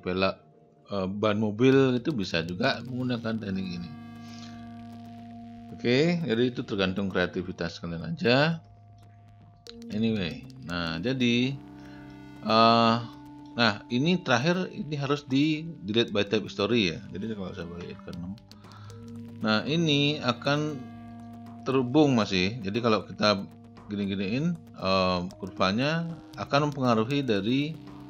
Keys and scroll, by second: 9.5 space, 17.9 6.